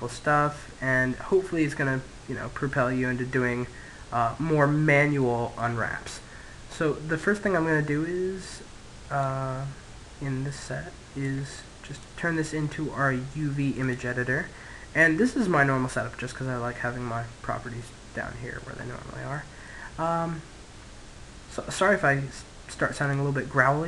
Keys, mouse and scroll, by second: 5.4-7.2 middle drag, 8.3 click, 10.5-13.8 drag, 17.6-20.9 middle drag, 22.8 click.